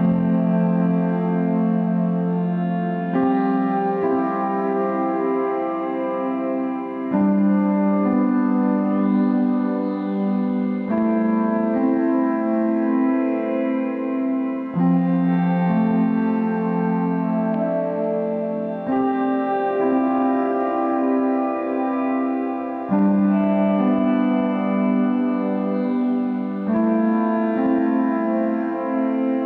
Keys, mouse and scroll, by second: 1.5-4.7 drag, 5.3-5.8 scroll up 2, 5.8-13.4 middle drag, 13.4-29.4 drag.